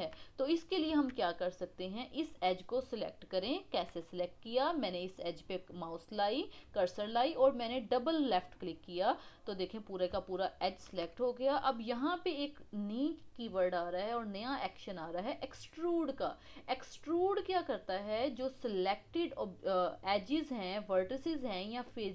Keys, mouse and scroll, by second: 0.2-0.8 scroll up 1, 0.8 Tab, 2.2 click, 3.0 scroll down 2, 3.5-5.0 shift+middle drag, 5.0 click, 8.3 click, 8.5 click, 9.8-10.3 scroll up 1, 10.3-13.4 shift+middle drag.